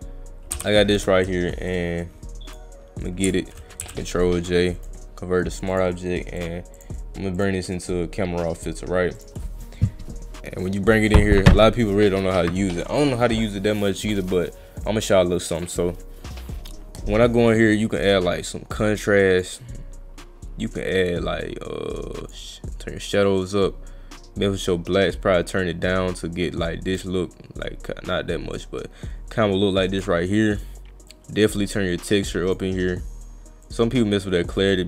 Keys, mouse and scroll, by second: 1.7 click, 4.8 right click, 5.7 click, 6.4 click, 6.8 click, 7.4 click, 9.2 click, 18.7 click, 20.8 click, 23.3-30.0 drag, 31.1-32.5 drag, 33.6-34.8 drag.